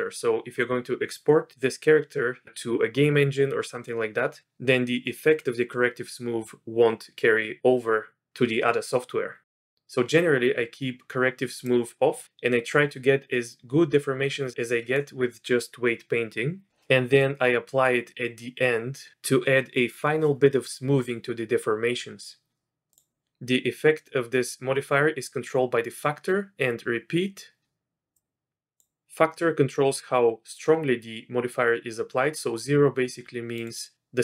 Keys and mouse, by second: 11.6 click, 22.9 click, 28.2 click, 33.6 click.